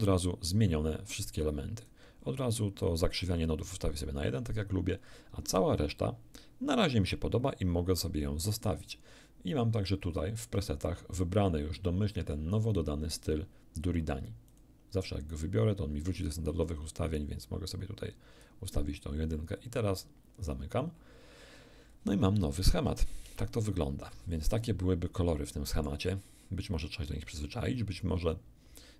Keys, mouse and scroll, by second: 0.2-2.0 alt+drag, 3.2 click, 12.5 click, 14.5 click, 16.6-18.6 drag, 20.4 click, 21.8 scroll up 1, 22.1 scroll down 1, 23.2 shift+F5, 24.0-24.4 shift+scroll down 2, 24.6-26.0 middle drag.